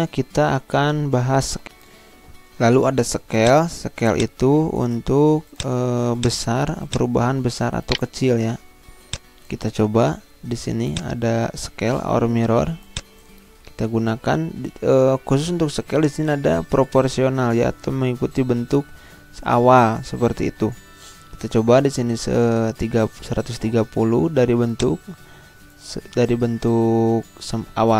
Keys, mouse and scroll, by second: 1.7 Insert, 3.3 click, 5.1 ctrl+z, 5.5 click, 7.9 shift+right click, 9.0-15.8 drag, 24.7-27.9 drag.